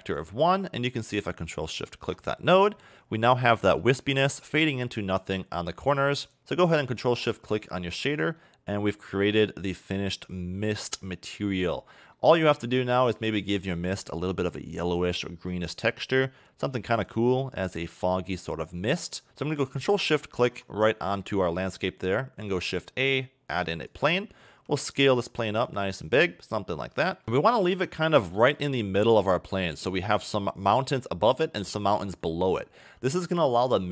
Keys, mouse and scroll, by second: 1.8 ctrl+shift+click, 2.3-2.9 scroll up 2, 3.0 scroll up 1, 3.2 middle click, 5.3 scroll down 1, 5.8 scroll down 1, 6.4 middle click, 6.5 ctrl+shift+click, 8.4 middle click, 9.1 middle click, 11.9 scroll down 2, 12.1 middle click, 12.4-13.7 scroll up 8, 13.7 click, 18.9-19.3 scroll down 2, 19.3 middle click, 20.0 shift+right click, 20.7 scroll down 2, 21.0 middle click, 22.7 shift+a, 24.5 s, 26.3 middle click, 28.3 g, 30.6 scroll up 3, 32.8 scroll down 2.